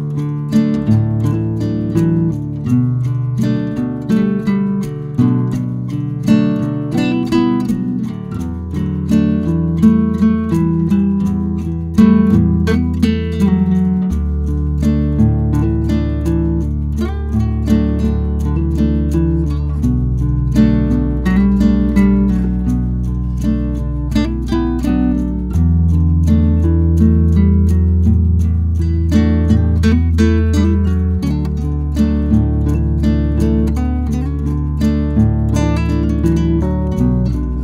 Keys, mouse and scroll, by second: 0.5-1.8 scroll down 2, 2.0 shift+middle drag, 2.2 click, 2.4 Tab, 3.0 ctrl+r, 3.9 3, 4.1 click, 4.6 click, 5.8 shift+d, 6.3 p, 6.6 Tab, 6.7 click, 7.2 Tab, 7.4 click, 7.7 e, 8.7 Tab, 9.1 Tab, 9.2 a, 9.3 s, 10.2 s, 10.6 g, 11.3 Tab, 11.5 scroll up 1, 11.7 Tab, 12.0-14.2 typing, 12.1 click, 12.3 alt+click, 13.4 Tab, 13.6 click, 13.9 Tab, 16.3 click, 16.7 middle click, 17.0-17.5 scroll up 5, 17.5 shift+click, 17.9 KP_0, 18.1 s, 19.0 Tab, 19.2-20.1 scroll down 3, 19.4 click, 20.1-20.6 scroll down 2, 20.3 click, 20.8-22.3 shift+middle drag, 22.7-23.4 shift+middle drag, 23.4 scroll down 1, 23.6-24.5 shift+middle drag, 24.5 shift+right click, 24.7 shift+a, 27.7 g, 28.5 Tab, 28.9-32.7 typing, 32.1 Tab, 35.0 g, 36.0 click, 37.3-37.6 drag.